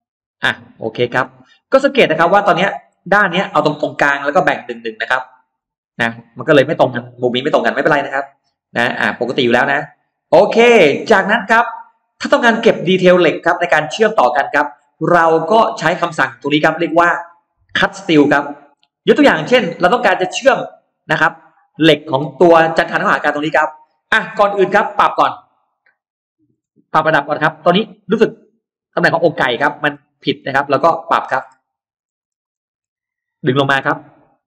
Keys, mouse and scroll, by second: 0.3-1.1 scroll down 4, 0.7 middle click, 1.7 middle click, 1.8-2.1 scroll up 2, 2.5 middle click, 5.0 middle click, 5.3 scroll down 1, 5.9 middle click, 5.9 scroll up 1, 6.0 scroll down 1, 6.6-6.9 scroll up 2, 7.7-11.2 middle drag, 11.5-12.3 scroll up 2, 12.0-14.4 middle drag, 14.5-14.8 scroll down 1, 15.4 scroll down 1, 18.2-19.3 scroll up 2, 19.4-21.5 middle drag, 21.8-22.1 scroll up 1, 23.4 middle click, 23.4 scroll up 1, 24.1 scroll down 1, 24.5 space, 25.5 click, 26.1 scroll up 1, 26.7 shift+click, 27.1 scroll down 2, 27.6-28.6 middle drag, 28.6-28.9 scroll down 2, 29.1 middle click, 29.7-30.1 scroll down 1, 30.1 scroll up 1, 30.4 middle click, 31.1-31.4 scroll down 1, 31.5-32.9 scroll up 2, 33.7 m.